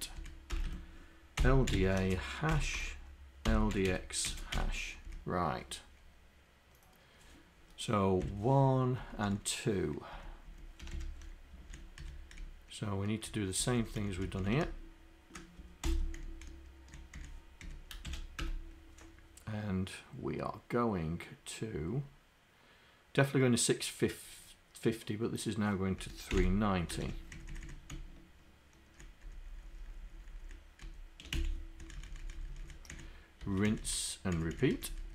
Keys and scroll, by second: 15.9 ctrl+Insert, 16.2 Down, 17.7 Up, 18.5 Return, 26.1 Left, 26.3 Delete, 27.4 Down, 27.6 Down, 29.9 shift+Down, 30.9 shift+Up, 31.4 Delete, 32.3 Up, 32.9 Down, 34.6 Down, 34.8 Up.